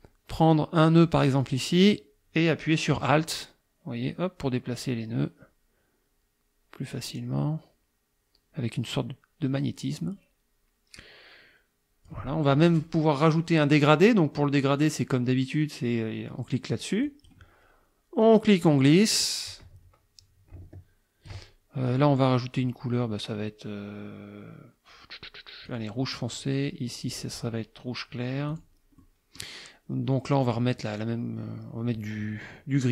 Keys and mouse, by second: 1.4-12.3 drag, 17.1 click, 18.2-21.5 drag, 21.9 click, 25.7 click, 27.1 click, 28.5 click, 29.0 click, 30.4 click.